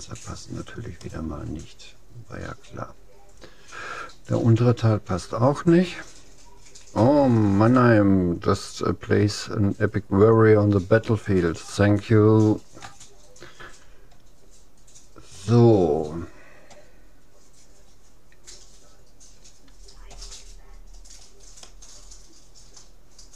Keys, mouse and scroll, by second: 0.3 middle click, 1.1-2.9 middle drag, 12.8 a, 20.9-21.3 scroll down 1, 21.3-23.3 middle drag.